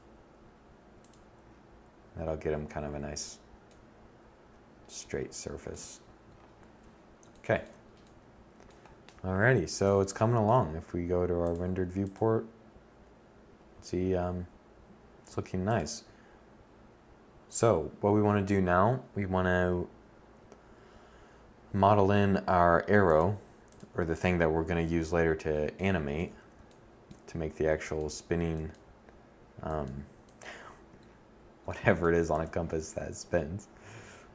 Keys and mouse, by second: 2.0 click, 5.1 a, 13.3-14.0 middle drag, 23.1 KP_7, 24.6 z, 30.7 shift+a.